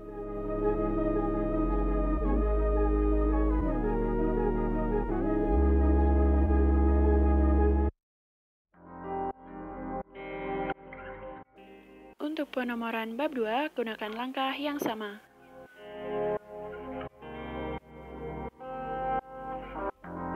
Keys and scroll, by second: 17.1-19.1 typing.